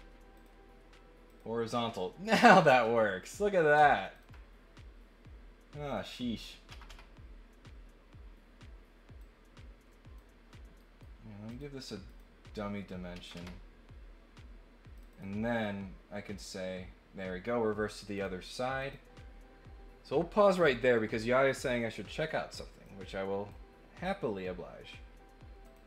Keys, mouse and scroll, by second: 0.3 click, 1.2 click, 3.2 click, 4.1 ctrl+click, 6.1 click, 9.2 click, 10.7 right click, 11.5 click, 12.1 click, 13.1 Escape, 14.9 click, 15.1 click, 16.3 click, 18.1 click, 18.7 click, 22.8 click, 25.6 click.